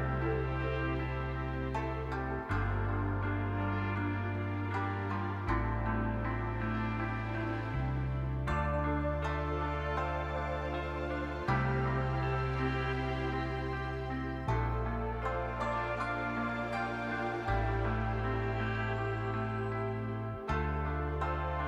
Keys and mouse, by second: 0.6 middle click, 0.9 shift+middle click, 1.2 middle click, 2.3 middle click, 3.3 shift+click, 3.6 click, 6.8 click, 7.6 shift+click, 9.3 click, 10.1 click, 10.5 shift+click, 10.8-12.2 drag, 12.8 shift+click, 14.4 click, 14.7 click, 15.2 shift+click, 15.4 click, 15.7 click, 17.7 click, 17.9 click, 18.5 shift+click, 19.8 click, 20.4 click, 21.1 shift+click, 21.4 click.